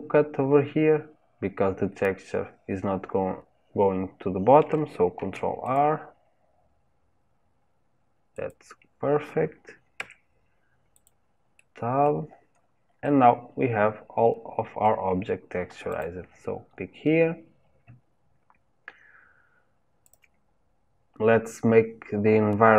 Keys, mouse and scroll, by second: 5.2 ctrl+r, 10.0 Tab, 11.1 click, 11.6 middle click, 12.3-12.7 scroll down 6, 13.0-15.9 middle drag, 15.9 click.